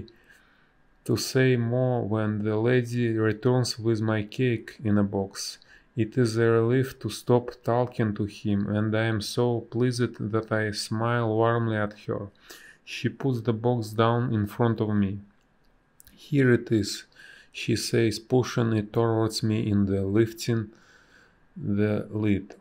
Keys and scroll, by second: 3.9 space, 4.9 a, 7.7 space, 16.7 b, 17.0 space, 18.5 ctrl+z, 18.7 space, 20.6 space, 21.7 space.